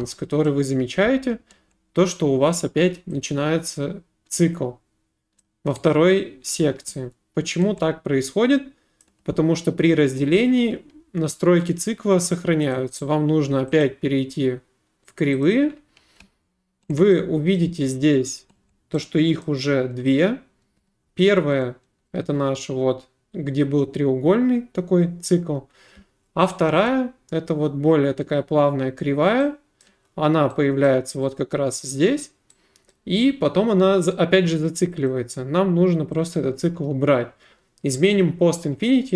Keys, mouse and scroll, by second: 0.0 s, 0.5 middle click, 5.4 click, 9.0 click, 12.7 click, 13.8 click, 15.4 click, 17.6 right click, 19.4 right click, 29.8 right click, 30.9 right click, 32.9 right click, 35.1 click, 36.3 click.